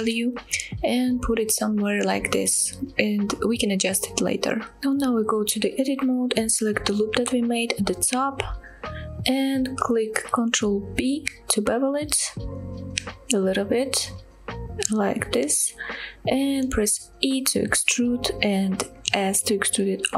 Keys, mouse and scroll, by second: 1.7 scroll down 2, 1.9-2.5 middle drag, 2.9-3.2 shift+middle drag, 3.3-3.6 scroll up 2, 4.6 Tab, 5.8 scroll down 1, 6.1 shift+middle click, 7.2 click, 7.4 click, 7.9 middle click, 8.3 scroll up 2, 8.5 middle click, 11.9 ctrl+b, 14.9 click, 15.4-16.1 scroll down 1, 16.1 middle click, 17.8 e, 19.2 s.